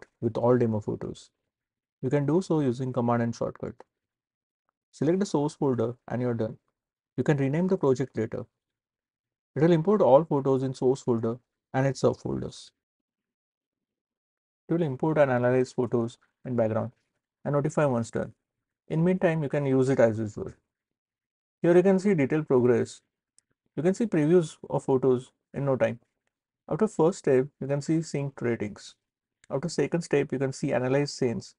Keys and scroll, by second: 3.8 super+n.